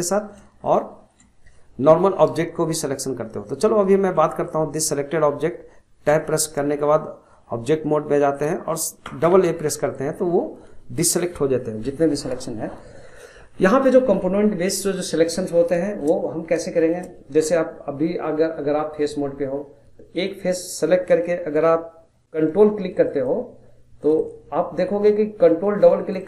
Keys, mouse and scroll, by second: 0.6-3.6 shift+middle drag, 4.2 click, 4.9-6.1 middle drag, 6.1 Tab, 7.1-9.0 middle drag, 9.0 a, 9.2 a, 12.5 middle click, 13.1-13.5 scroll up 1, 13.5 middle click, 14.1-14.4 scroll up 1, 14.4-15.5 middle drag, 15.5 scroll up 1, 15.8-19.7 shift+middle drag, 20.2 click, 22.2 middle click, 23.1 ctrl+click, 24.0 ctrl+click, 24.2 ctrl+click, 26.0 ctrl+click, 26.2 ctrl+click.